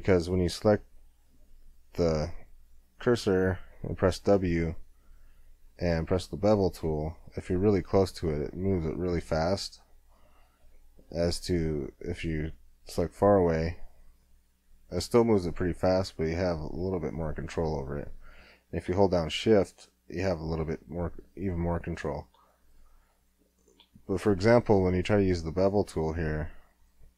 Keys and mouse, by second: 1.3 w, 11.4 w, 23.1-24.4 middle drag, 25.9-27.1 middle drag, 26.7 w.